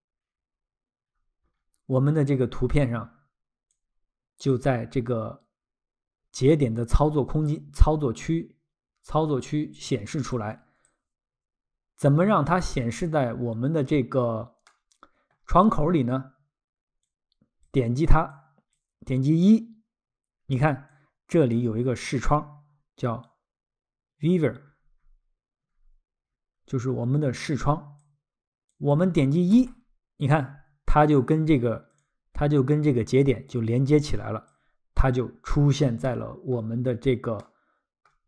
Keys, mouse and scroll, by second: 1.1-1.4 scroll, 3.7 click, 6.8 click, 10.3 click, 13.5 scroll, 14.7 middle click, 15.6 scroll, 17.1 click, 18.3 click, 20.9 click, 21.6 scroll, 24.7 scroll, 27.4 click, 28.7 click, 29.5 1, 31.2 click, 32.0 click, 34.9-36.1 scroll, 36.1 middle click, 36.9 scroll, 37.4 middle click.